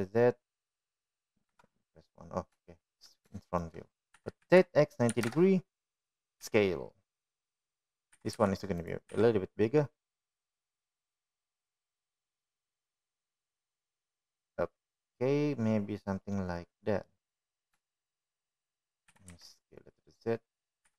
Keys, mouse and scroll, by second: 1.2 g, 3.3 KP_1, 4.5 shift+middle drag, 5.3 shift+middle click, 6.0 r, 8.3 s, 10.0 g, 11.0 s, 16.9-19.0 middle drag, 19.8-20.1 shift+middle drag.